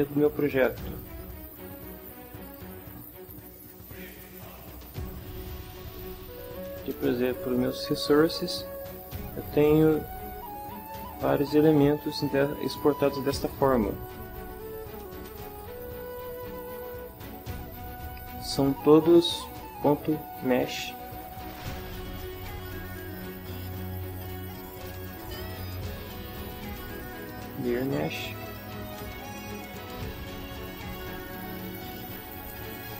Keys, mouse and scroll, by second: 5.1 click, 7.3 click, 10.3 click, 11.2 click, 13.5 click, 14.6 click, 15.4 click, 22.2 click, 23.7 click, 25.0 click, 26.8 click, 28.4 click, 30.7 click, 31.6 click.